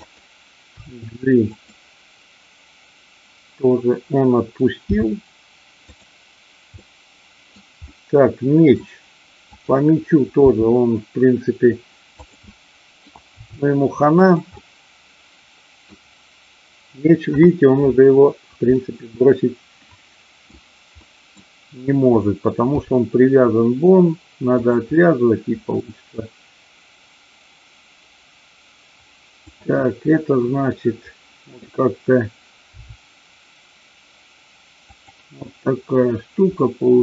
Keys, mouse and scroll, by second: 0.0 click, 0.6 g, 1.5 click, 4.9 g, 5.9 click, 6.8-7.6 middle drag, 7.9-8.8 middle drag, 10.5 r, 12.2 click, 12.5 middle click, 14.2 click, 14.5-16.0 middle drag, 18.6-20.5 middle drag, 20.9-21.4 middle drag, 22.8 g, 24.5 click, 25.0 middle click, 29.5-30.5 drag, 30.8 middle click, 32.8 r, 35.0 click, 36.5-36.9 middle drag.